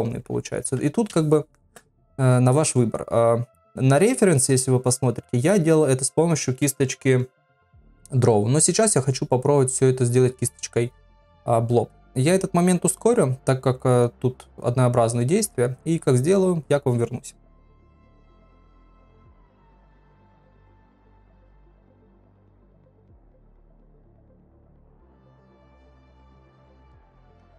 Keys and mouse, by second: 0.6 ctrl+z, 21.0 click, 21.5 middle click, 22.6 click, 22.8 click, 22.9 click, 23.0 click, 23.2 click, 23.4 click, 23.6 click, 26.7 ctrl+middle click, 26.8 middle click, 27.2 click, 27.5 click.